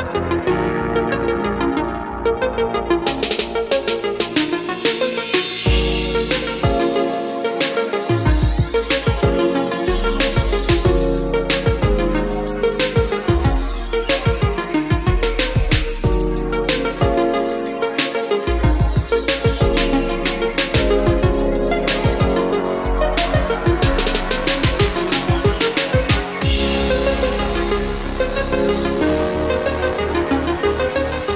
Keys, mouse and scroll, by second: 0.2 scroll down 1, 0.9 click, 1.7 F4, 3.4 click, 7.1 space, 8.3 click, 14.3 ctrl+q, 15.6 click, 19.3 KP_5, 21.2-22.3 drag, 24.9 Down, 26.2-27.3 drag, 28.6 Escape, 29.1-30.4 drag, 30.5 Up.